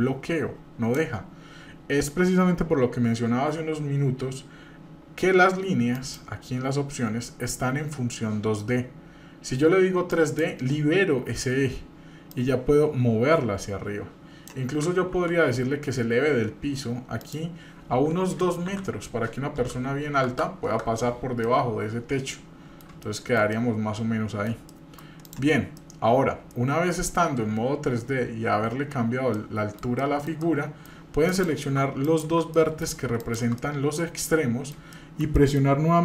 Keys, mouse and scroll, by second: 5.9 click, 10.1 click, 12.3-14.5 drag, 15.1 ctrl+z, 17.2-20.8 drag, 20.3 KP_0, 21.2 scroll down 2, 21.4-22.8 middle drag, 23.0 shift+middle click, 23.5 middle click, 24.7 shift+middle click, 25.2 click, 25.8-27.1 middle drag, 29.3-30.8 middle drag, 31.3 click, 32.0 ctrl+click, 32.5 middle click, 33.2 shift+click, 33.6-34.7 middle drag, 34.9 shift+middle click, 35.3 middle click.